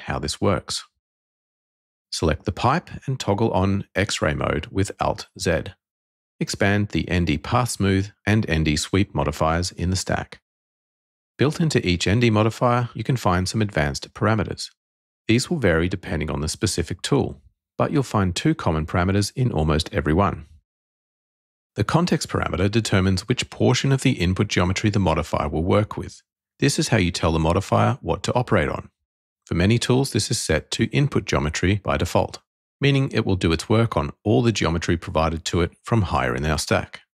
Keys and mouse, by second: 2.2 click, 4.5 alt+z, 7.1 click, 8.2 click, 12.8 click, 14.2 click, 19.9 click, 20.7 click, 23.7 click.